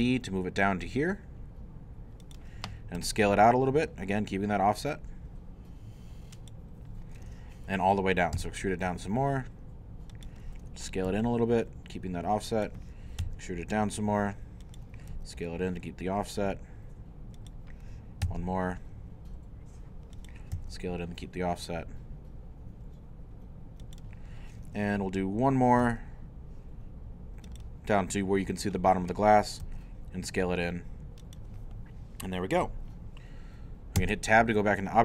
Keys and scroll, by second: 0.0 z, 3.0 s, 8.4 e, 11.1 s, 13.2 e, 15.1 s, 18.2 e, 20.5 s, 25.8 e, 29.6 s, 34.0 Tab.